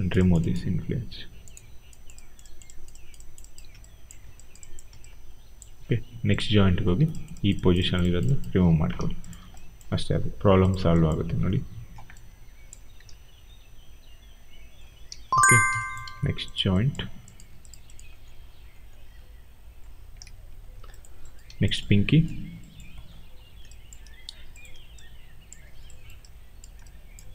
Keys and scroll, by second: 8.9 w, 11.1 e, 13.0 ctrl+z, 14.8 ctrl+z, 16.0 q, 18.2 e, 20.1 ctrl+z, 21.4 q.